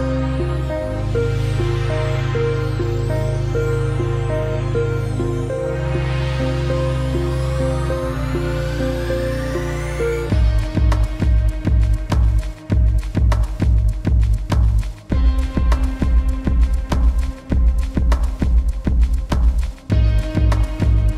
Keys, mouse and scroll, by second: 0.3 click, 1.5-2.4 scroll down 1, 2.8 click, 5.0 click, 6.1 Up, 6.6 ctrl+alt+Up, 6.8 ctrl+alt+Down, 8.6 shift+click, 10.3 scroll down 1, 10.6 click, 11.0 space, 11.7 click, 12.5 alt+scroll down 1, 12.7 click, 13.8 space, 14.0 click, 14.2 space, 14.7 alt+scroll up 2, 14.9 click, 15.2 space, 16.4 click, 16.9 F9, 17.2 click, 20.3 shift+,.